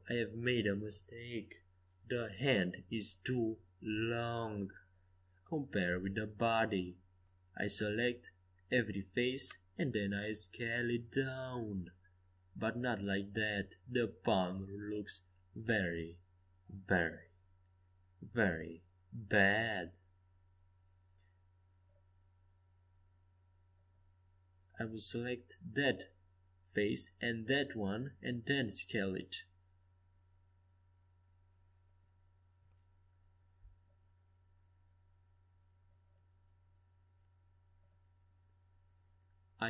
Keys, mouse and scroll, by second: 7.9 s, 15.2-17.8 drag, 22.3 ctrl+z, 23.2 ctrl+z, 24.0 a, 25.0 click, 25.6 c, 30.1 s, 36.9 Escape, 37.5 a.